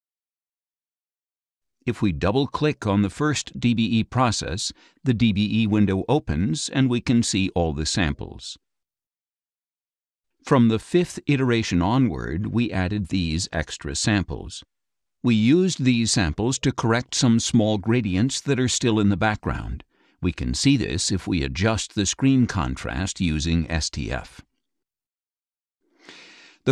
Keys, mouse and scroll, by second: 2.2 click, 4.5-6.1 drag, 10.7 click, 11.2-14.3 drag, 16.0 click, 19.6 middle click, 19.6 scroll up 1, 19.7 click, 22.5 click, 26.6 click.